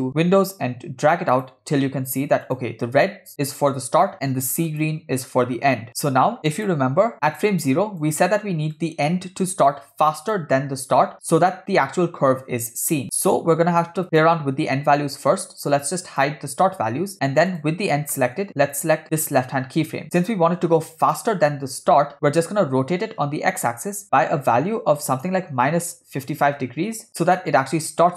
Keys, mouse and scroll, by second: 2.5 click, 4.7 click, 5.9 click, 6.5 click, 7.4 click, 8.8-10.4 drag, 13.0 click, 14.1 click, 16.1 click, 17.5 click, 18.1 middle click, 18.7 click, 19.2 click, 22.6 r, 27.1 scroll down 2, 27.4 middle click.